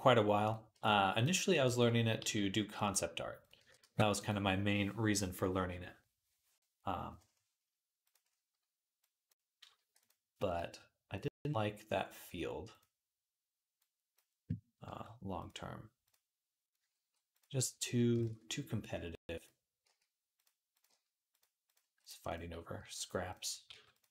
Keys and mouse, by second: 0.3-3.2 middle drag, 0.6 b, 1.4 b, 2.0 g, 3.2 click, 3.3-8.8 middle drag, 3.4 g, 8.8-9.9 drag, 9.6 g, 9.9-11.1 middle drag, 11.1-12.6 drag, 12.6-13.6 middle drag, 13.6-15.3 drag, 14.7 g, 15.3-19.1 middle drag, 16.8 g, 18.1 ctrl+z, 19.1-20.3 drag, 19.7-24.1 typing, 20.3-23.1 middle drag, 23.1 click, 23.2 middle click, 24.0 click.